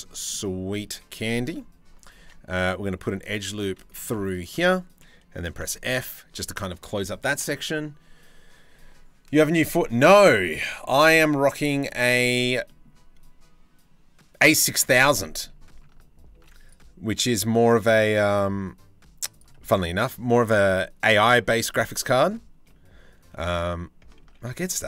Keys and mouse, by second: 0.8 middle click, 1.9 ctrl+r, 3.7 2, 5.2 f, 10.2 click, 10.5 shift+middle click, 10.9 click, 11.2 shift+middle click, 12.0 shift+middle click, 12.3 middle click, 14.2 shift+middle click, 14.8 middle click, 16.1 ctrl+r, 19.2 middle click, 22.8 f, 23.9 ctrl+z, 24.7 a.